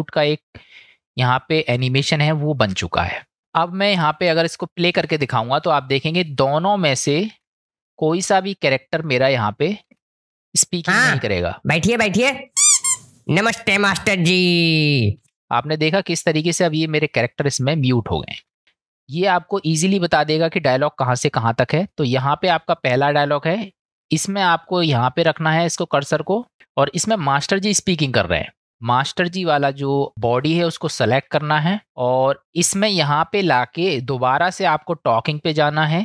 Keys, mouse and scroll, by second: 7.4 ctrl+space, 9.9 space, 18.5 ctrl+space, 25.4 click.